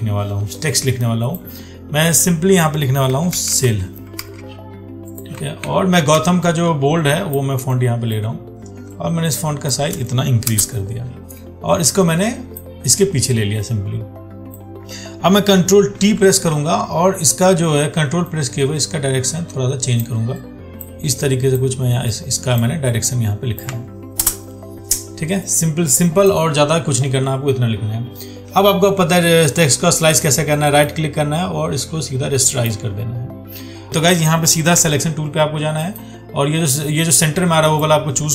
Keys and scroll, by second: 4.5 ctrl+a, 5.9 ctrl+t, 16.2 ctrl+t, 35.0 ctrl+1.